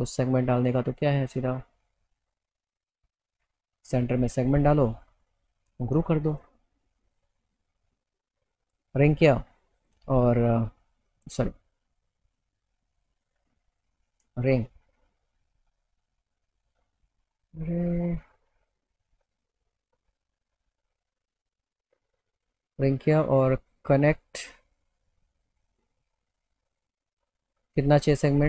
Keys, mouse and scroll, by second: 0.0 click, 2.1 click, 4.7 click, 6.3 click, 7.9 alt+middle click, 9.1 click, 11.1 click, 12.0 click, 14.1 click, 16.6 click, 17.2 click, 18.6 click, 19.9-21.1 alt+middle drag, 22.2 click, 23.7 click, 27.9 click.